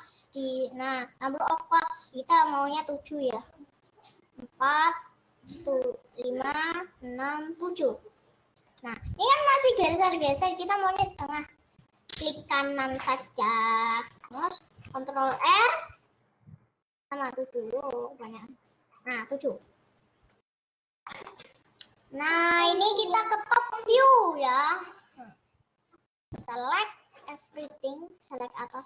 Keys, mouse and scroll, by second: 13.3 middle click, 13.7-14.1 scroll up 2, 14.1 scroll down 3, 14.3-15.3 middle drag, 15.3 ctrl+r, 21.2-22.8 middle drag, 22.8-24.7 drag, 28.7 click.